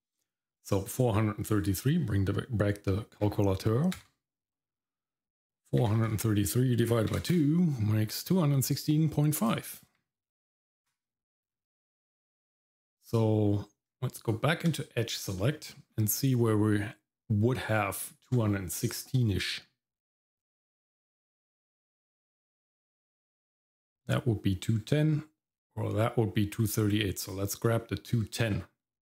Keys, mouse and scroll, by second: 11.5-13.9 scroll up 1, 13.9 Tab, 15.4 middle click, 16.1 click, 18.8 click, 20.4-29.1 drag.